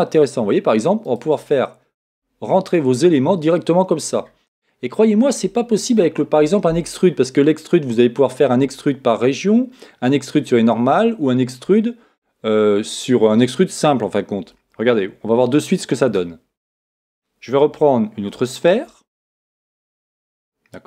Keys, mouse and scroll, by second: 1.6-4.6 middle drag, 15.9-17.7 middle drag, 18.7 shift+a.